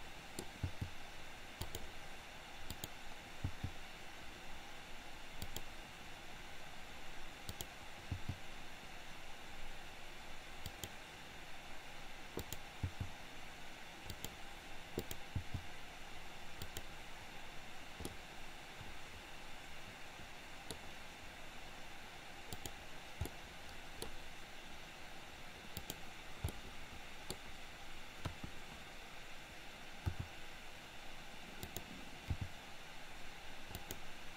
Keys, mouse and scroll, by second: 0.8 g, 2.8 click, 3.6 g, 8.2 g, 12.4 click, 12.9 g, 14.9 click, 15.4 g, 18.2-20.7 middle drag, 22.4 click, 23.4-24.1 middle drag, 25.8 click, 26.4-27.3 middle drag, 28.3 KP_1, 30.2 r, 32.3 g.